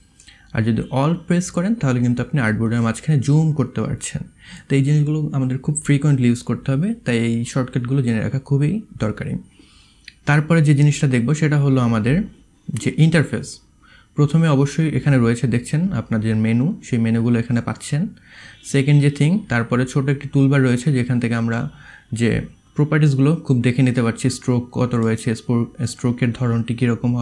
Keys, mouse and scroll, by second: 1.0-2.7 alt+middle drag, 1.0-1.9 alt+scroll, 3.1-4.2 alt+middle drag, 4.0 alt+scroll.